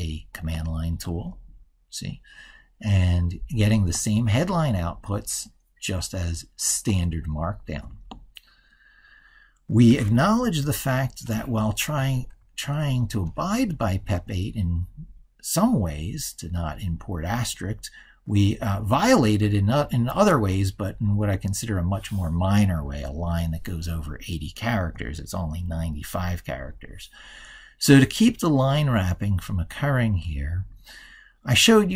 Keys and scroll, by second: 10.3 ctrl+super+Left.